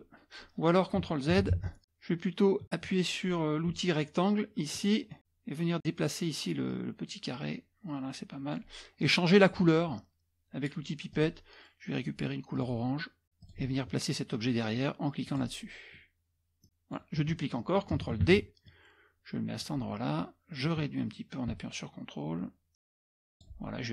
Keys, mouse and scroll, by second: 1.6 ctrl+z, 4.8 click, 6.7-8.9 drag, 9.1 middle click, 9.1-9.7 scroll up 1, 11.1 click, 12.6 click, 13.4 click, 15.3 click, 16.2-17.3 drag, 18.3 ctrl+d, 18.7-20.0 drag, 20.7-23.0 drag, 23.1 click.